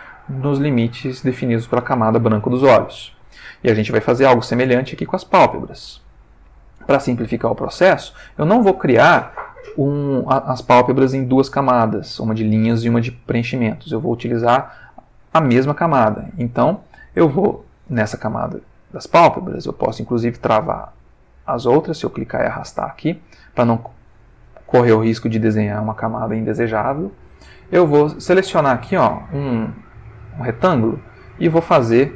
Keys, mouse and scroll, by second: 1.1 ctrl+middle click, 4.2 click, 17.2 click, 19.8-21.6 drag, 30.1-32.1 drag.